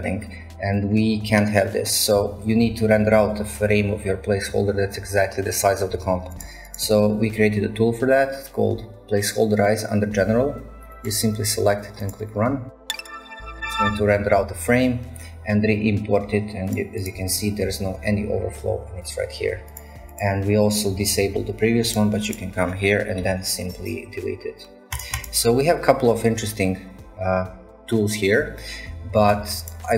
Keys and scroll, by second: 23.3 Delete.